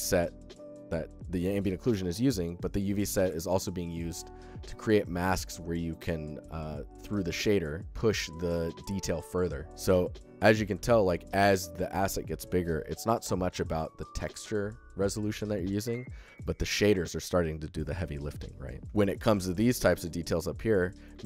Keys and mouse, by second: 10.3 alt+shift+drag, 10.5 ctrl+alt+click, 10.8 alt+click, 11.1-15.7 alt+shift+middle drag, 18.8-19.1 alt+shift+drag, 20.7 alt+shift+drag, 21.0 ctrl+alt+drag.